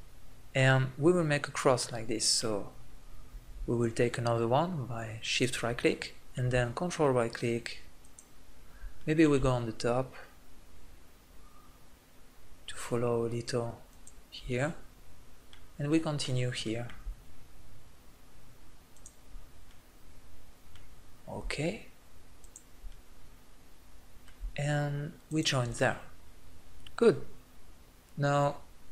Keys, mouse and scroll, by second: 0.0 middle click, 0.7-2.6 middle drag, 6.0-9.0 middle drag, 15.1-18.9 middle drag, 19.7 middle click, 23.3 middle click, 27.0-28.5 middle drag.